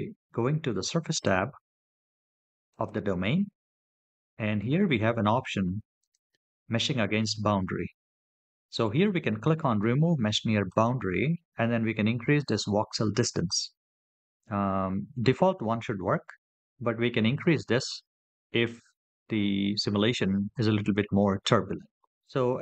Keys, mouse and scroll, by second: 2.5 click, 3.9 scroll down 2, 5.8 click, 10.5 click.